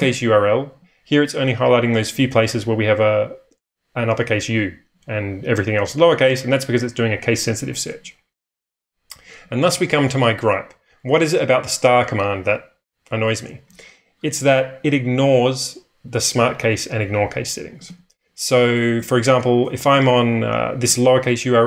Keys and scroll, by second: 8.4 ⟲, 17.5-19.9 typing.